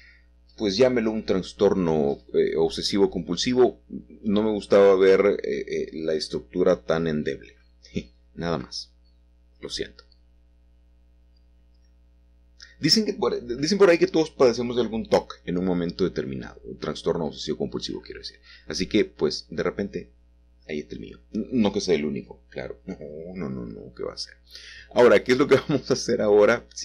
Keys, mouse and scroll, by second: 1.9 middle click, 2.7-3.8 scroll down 2, 3.2 middle click, 12.0 ctrl+middle click, 16.6-18.7 middle drag, 17.5 q, 19.8 a, 19.9 a, 24.2-26.8 alt+shift+drag.